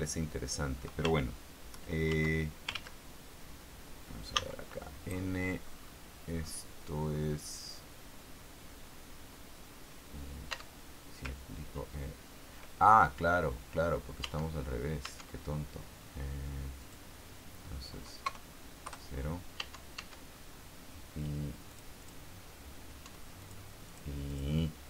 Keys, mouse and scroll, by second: 2.5 ctrl+Tab, 4.7 n, 5.5 scroll up 2, 6.0-6.4 scroll up 2, 6.7-7.0 scroll up 2, 7.3-7.8 scroll up 2, 10.9 Tab, 14.6 Tab, 15.4 Tab, 17.2 click, 18.6 KP_0, 19.9 Tab, 22.0 click, 23.4 Tab, 23.7 click, 24.2 click, 24.6 click.